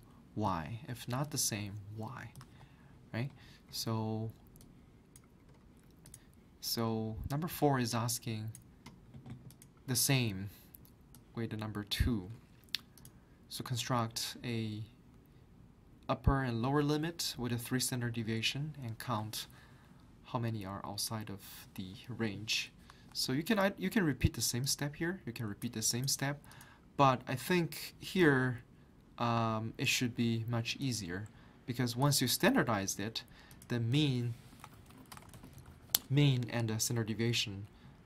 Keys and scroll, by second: 2.4 alt+Tab, 22.9 alt+Tab, 34.5-36.2 typing.